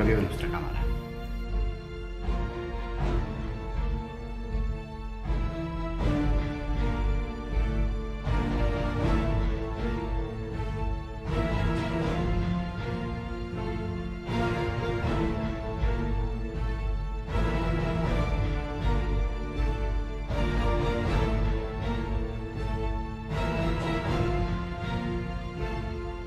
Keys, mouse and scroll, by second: 12.3 Left, 15.1 Right, 20.9 BackSpace, 25.5 BackSpace.